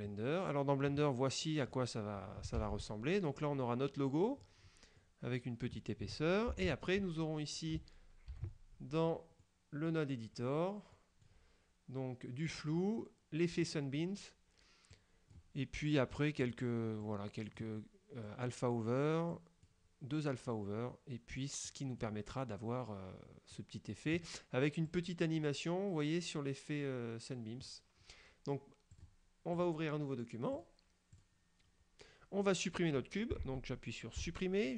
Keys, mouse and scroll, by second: 2.7 ctrl+Up, 3.4 scroll up 1, 3.7 middle click, 4.5-5.1 scroll up 2, 5.1 middle click, 6.6 ctrl+Up, 8.4 ctrl+Up, 9.5 middle click, 10.4-10.9 scroll up 1, 11.0 middle click, 13.7 click, 15.0 click, 16.2 click, 17.1 click, 18.3 click, 19.4 click, 21.7 click, 23.6 click, 25.0 click, 29.0 click, 29.7 click, 30.7 click, 31.2 click, 34.3 Delete.